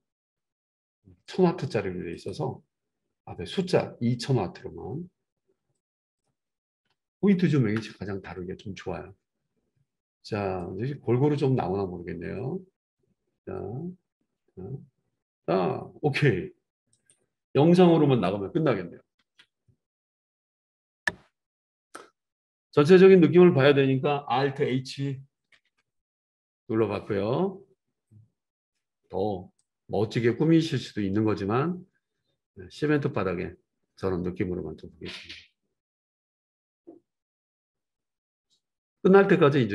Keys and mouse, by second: 9.4-17.1 drag, 17.1-20.0 middle drag, 20.3 ctrl+s, 23.1 click, 25.2 alt+middle click, 25.6 alt+h, 25.8-29.6 middle drag, 29.6-39.7 drag.